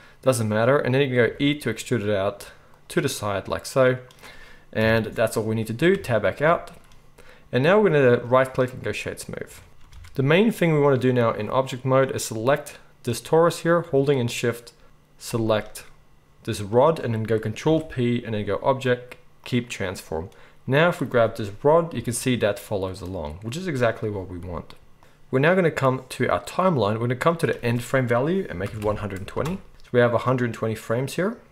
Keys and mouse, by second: 1.2 e, 4.8 KP_1, 5.9 Tab, 9.4-17.3 shift+middle drag, 9.7 Tab, 10.0 alt+a, 15.3 shift+click, 17.3-23.2 ctrl+right drag, 17.6 ctrl+p, 21.9 g, 23.2-25.0 middle drag, 25.0-31.5 drag.